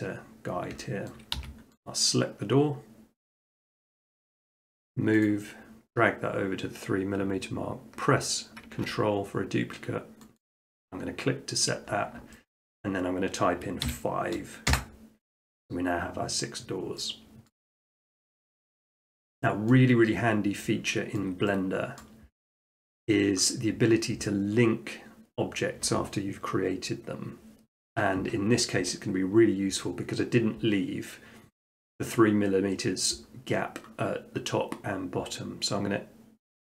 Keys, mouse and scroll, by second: 1.1 shift+middle click, 1.4 s, 1.9 click, 3.7 click, 5.3 click, 8.7 click, 10.4 click, 11.1 scroll, 11.4 middle click, 11.6 middle click, 11.7 middle click, 12.0 middle click, 12.6 shift+middle click, 12.8 middle click, 13.0 middle click, 13.9 5, 14.7 Return, 17.5 middle click, 18.0 middle click, 18.3 middle click, 18.5 middle click, 19.2 shift+middle click, 19.3 shift+middle click, 19.7 middle click, 20.2 middle click, 21.2-23.2 shift+middle drag.